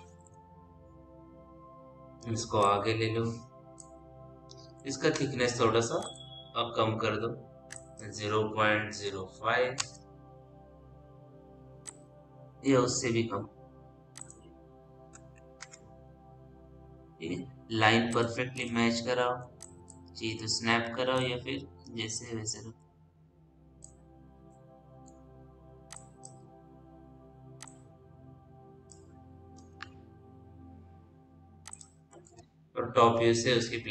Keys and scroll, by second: 0.6 l, 8.7 ., 9.0 KP_0, 9.3 5, 9.6 Return, 15.2 KP_3, 15.5 Return, 30.6 ctrl+z, 32.2 t.